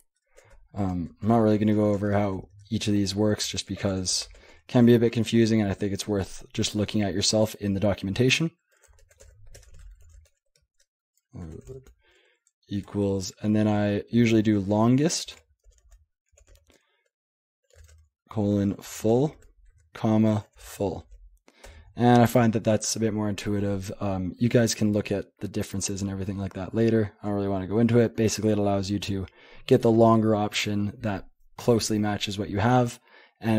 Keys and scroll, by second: 0.4 ctrl+p, 0.4-4.4 typing, 0.9 ctrl+BackSpace, 8.6-12.8 typing, 14.3-21.5 typing, 21.7 Return.